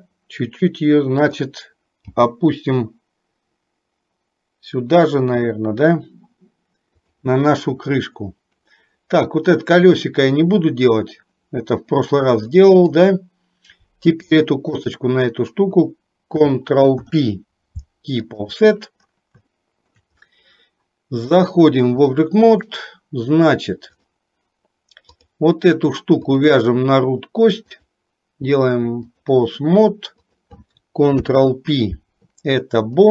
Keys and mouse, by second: 2.1 g, 12.5 shift+middle click, 17.0 ctrl+p, 19.6 shift+middle click, 21.5 click, 25.1 click, 28.0-29.4 drag, 30.4 click, 31.1 ctrl+p.